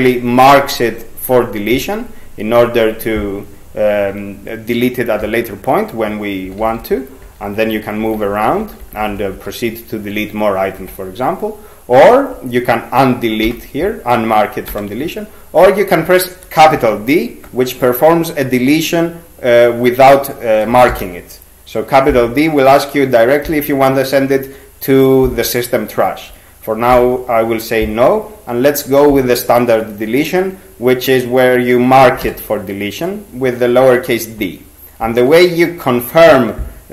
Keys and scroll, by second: 6.2-10.8 typing, 13.5 u, 14.7 p, 20.9 shift+d, 26.9 n, 32.2 d.